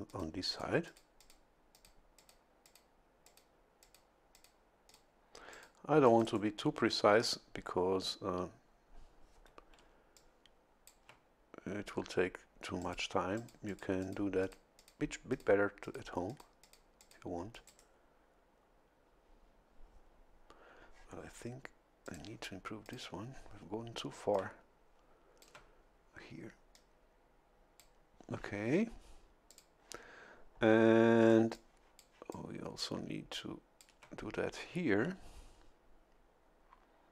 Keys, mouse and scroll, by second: 0.1 click, 0.5 click, 0.9 click, 1.7 click, 2.2 click, 2.6 click, 3.3 click, 3.8 click, 4.3 click, 4.9 click, 5.5 click, 6.1 click, 6.2 right click, 9.8 a, 10.2 click, 12.8 click, 13.4 click, 14.4 click, 14.8 click, 15.3 click, 15.8 click, 16.3 click, 16.6 click, 17.0 click, 17.5 click, 17.7 right click, 22.1 click, 22.9 click, 24.1 a, 24.3-25.7 drag, 26.7-28.0 drag, 29.5 click, 31.3 a, 31.5-33.2 drag, 33.3 click.